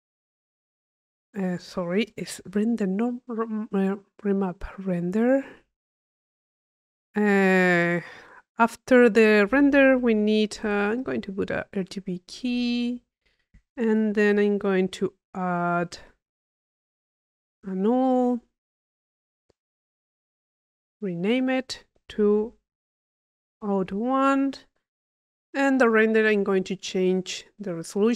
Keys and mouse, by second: 0.4-1.5 drag, 1.6 click, 2.2 Delete, 2.8 Tab, 5.0-6.2 drag, 6.3-11.3 drag, 9.6 Tab, 11.6 click, 12.2 click, 13.1-16.8 drag, 13.6 Tab, 17.3 Delete, 17.7 u, 18.7-22.3 drag, 24.9 click, 27.3 click, 28.0 click.